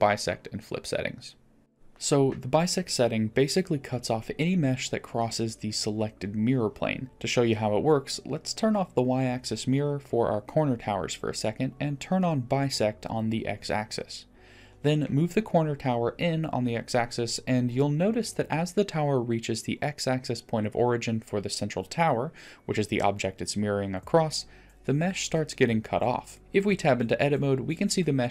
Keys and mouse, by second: 0.0 middle click, 0.1 click, 4.4-4.8 middle drag, 5.0-5.4 middle drag, 13.3 click, 14.3 middle click, 15.1 click, 15.4 middle click, 16.9 g, 27.3-28.3 middle drag.